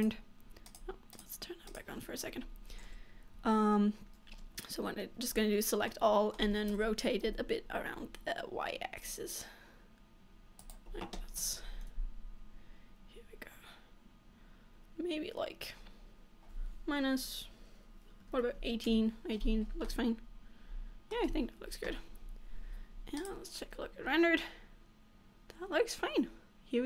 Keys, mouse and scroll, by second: 0.1 click, 1.3 click, 1.7 click, 2.9 Tab, 3.9 Tab, 5.3 a, 6.0 middle click, 8.2 r, 11.5 r, 19.6-20.0 scroll down 4, 20.0 middle click, 21.4-22.0 scroll up 2, 22.0 Tab, 23.7 click, 24.2-24.5 scroll up 2, 24.6 middle click.